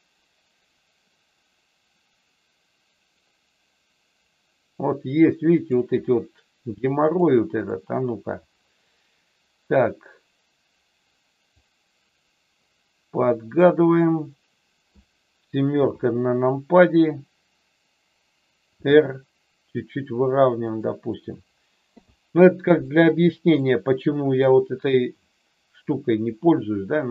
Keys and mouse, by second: 7.1 click, 9.6-11.5 drag, 13.5-14.9 middle drag, 15.7 KP_7, 18.7 r, 20.7 click, 21.9 i, 23.6 middle click, 25.9-27.1 drag.